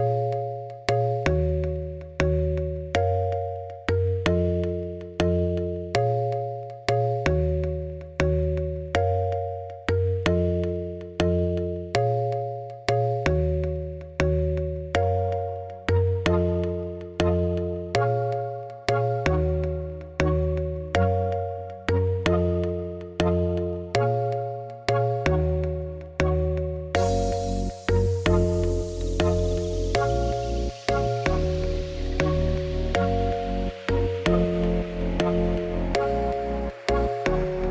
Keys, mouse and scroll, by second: 0.5 shift+a, 2.8 middle click, 3.1 1, 3.7 KP_7, 4.1 scroll up 4, 4.2 z, 6.5 KP_1, 10.9 e, 14.2 click, 15.8 click, 16.1 g, 18.3 e, 25.7 e, 28.2 e, 31.3 e, 34.2 e, 35.6 shift+click, 36.1-37.7 ctrl+right drag.